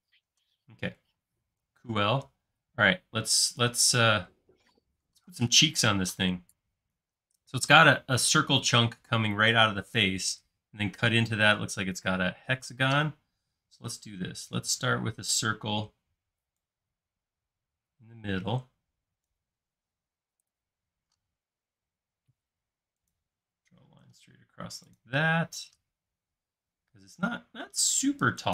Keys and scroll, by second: 14.5 c, 19.9 space, 21.1 l.